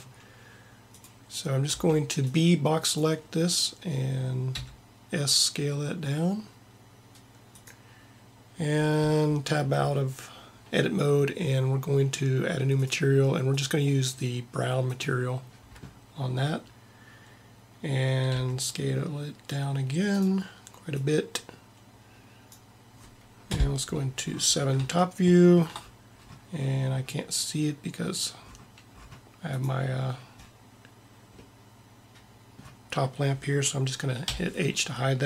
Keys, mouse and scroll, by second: 1.8 b, 4.8 s, 9.1 Tab, 18.4 s, 23.5 KP_7, 23.8 KP_7, 29.7-31.5 drag, 34.4 h.